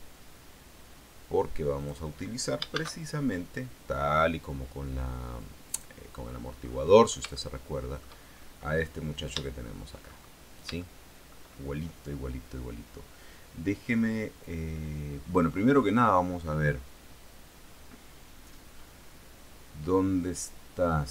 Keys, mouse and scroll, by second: 1.9 click, 2.9 shift+a, 5.9 click, 6.8-7.2 scroll up 1, 7.5 shift+middle click, 8.5-9.3 shift+scroll up 1, 9.6 shift+middle click, 10.4-11.0 shift+scroll up 4, 11.0 shift+middle click, 14.3-14.8 scroll up 2, 14.9 scroll up 2, 15.3-16.3 scroll down 2.